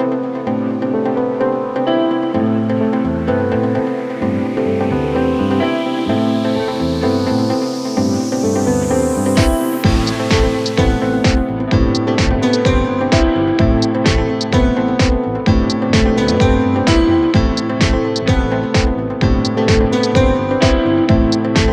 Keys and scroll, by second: 14.3 Delete.